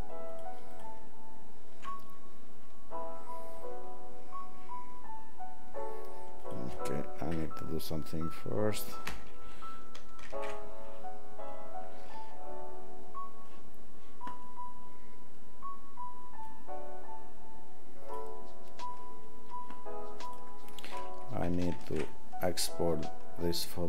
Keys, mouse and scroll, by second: 0.4 alt+click, 0.8 alt+click, 4.3 alt+click, 10.2 ctrl+alt+shift+w, 20.2 click, 21.7 ctrl+alt+shift+w.